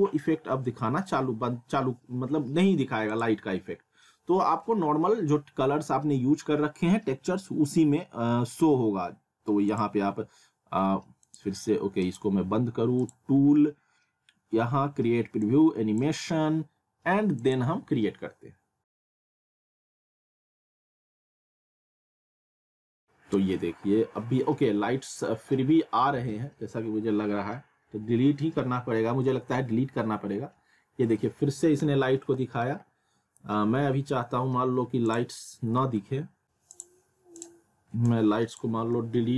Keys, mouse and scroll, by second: 3.1 click, 9.7 click, 15.4-19.0 drag, 35.1 click, 35.2 click, 36.7 click.